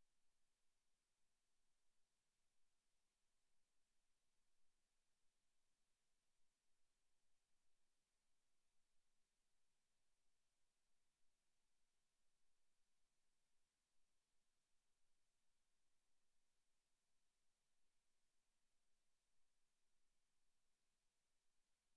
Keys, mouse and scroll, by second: 0.8 s, 4.1 scroll up 1, 4.3 Tab, 4.6 middle click, 5.7 middle click, 7.0 click, 8.7 click, 9.5-10.1 scroll down 3, 10.1 scroll down 2, 12.5 click, 13.0 click, 13.3 click, 17.1 click, 18.2 middle click, 18.7 right click, 19.0 shift+right click, 19.5 shift+right click, 19.5 x, 21.2-21.7 scroll up 3, 21.7 shift+middle click.